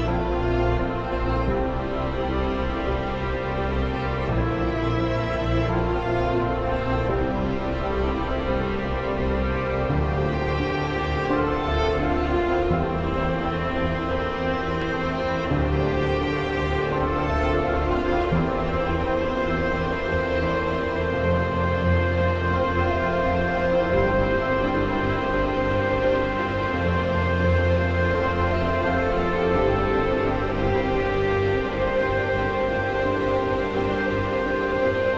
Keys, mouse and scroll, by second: 0.3 typing, 1.0-6.3 drag, 6.3 F5, 7.6 click, 9.3 ctrl+click, 21.3 click, 23.2 ctrl+r, 24.6 shift+click, 26.5 F12, 27.7 click, 30.7 F3, 31.4 click, 32.1 right click, 32.8 F2, 32.9-34.4 drag, 34.4 F8.